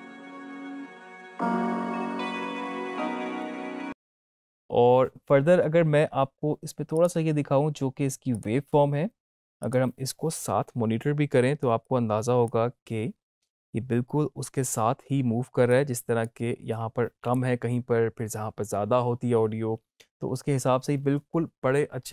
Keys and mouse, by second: 3.4 space, 6.9 click, 11.8-15.6 drag, 16.0-18.5 drag.